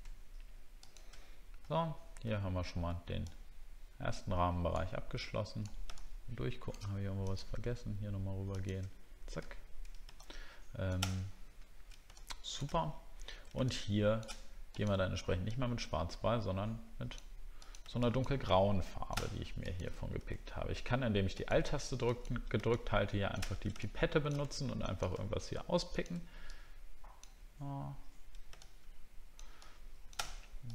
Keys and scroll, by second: 1.7 alt+scroll down 1, 2.3 alt+scroll up 1, 9.5 alt+scroll down 1, 11.2 alt+scroll up 1, 13.0 alt+scroll up 1.